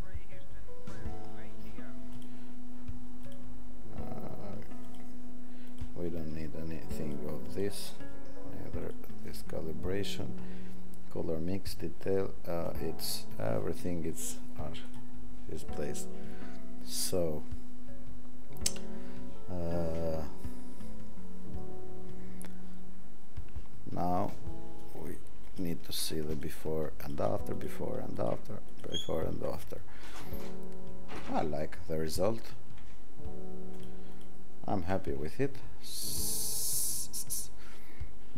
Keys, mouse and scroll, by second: 2.5 alt+scroll, 25.7 alt+click, 26.4 alt+click, 27.1 alt+click, 27.7 alt+click, 28.3 alt+click, 28.8 alt+click, 33.9 alt+click, 34.2 alt+click.